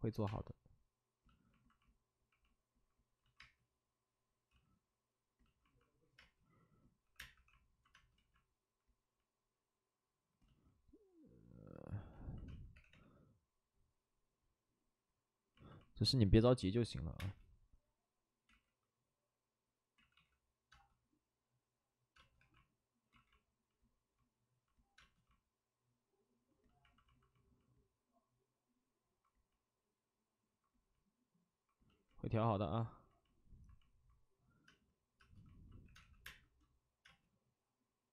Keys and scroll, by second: 2.7 space, 3.2 ctrl+z, 3.3 space, 4.4 ctrl+z, 6.1-7.9 typing, 8.1 ctrl+z, 12.4 space, 12.7 3, 13.7 3, 16.8-17.6 typing, 18.4 ctrl+z, 19.9 ctrl+z, 20.7 ctrl+z, 20.7 space, 22.3 2, 23.1 ctrl+z, 24.9 space, 34.7-36.6 typing.